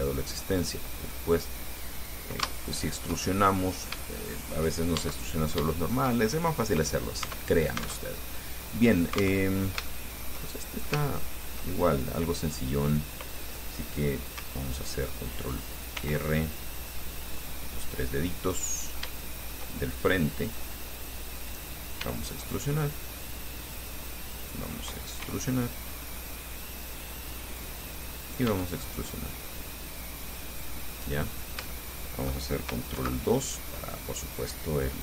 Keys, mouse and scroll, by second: 1.3 click, 2.7 Caps_Lock, 2.7-4.3 shift+middle drag, 5.2 Caps_Lock, 5.5-5.9 shift+scroll up 1, 6.0 shift+click, 6.5 shift+click, 7.5 Tab, 8.3 alt+Tab, 9.6 Tab, 10.1 shift+click, 10.8-11.8 shift+drag, 16.2 r, 16.8 ctrl+scroll up 3, 17.6 click, 18.1 click, 18.7 middle click, 20.7 click, 21.5 right click, 22.2 e, 23.9 click, 24.6 right click, 25.4 e, 27.8 click, 28.4 right click, 28.7 e, 30.7 click, 31.2 middle click, 31.9 shift+middle click, 33.2 ctrl+2, 33.8-35.0 ctrl+drag.